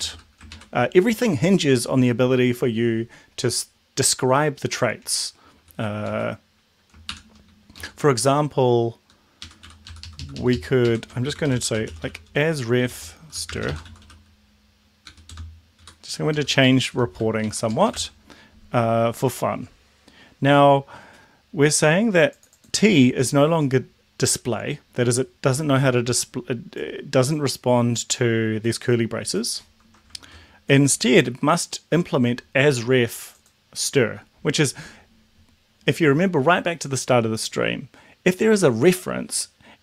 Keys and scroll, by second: 0.5 ctrl+shift+Right, 5.5 Down, 5.8 Down, 6.0 Up, 7.1 shift+Home, 7.7 Left, 9.4 Up, 9.6 End, 9.9 ctrl+Left, 10.7 ctrl+shift+Right, 11.0-14.5 typing, 15.0 Down, 15.3 shift+Return, 15.7 Up, 16.2 Down, 16.6 Right, 17.0 shift+., 17.3 Right, 17.6 Down, 30.2 ctrl+z.